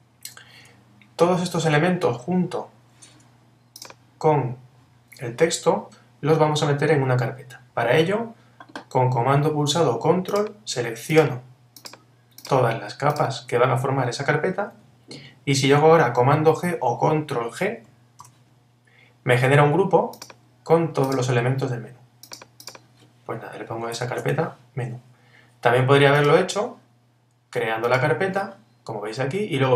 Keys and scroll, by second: 18.2 super+g, 24.8 Return.